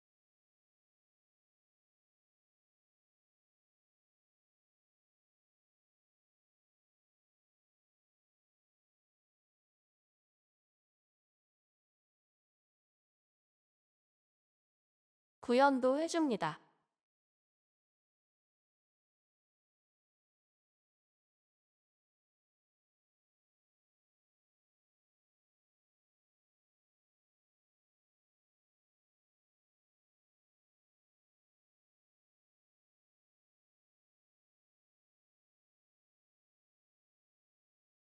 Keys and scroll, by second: 1.0 ctrl+c, 16.6 ctrl+c, 16.7 Return, 17.0 ctrl+v, 25.3 ctrl+c, 27.2 ctrl+v, 35.8 BackSpace.